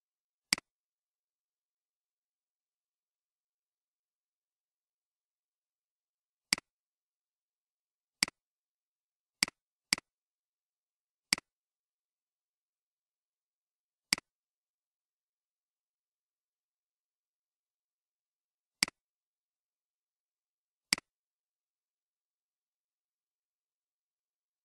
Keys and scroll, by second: 1.8-3.0 typing, 3.3 Return, 8.4 typing.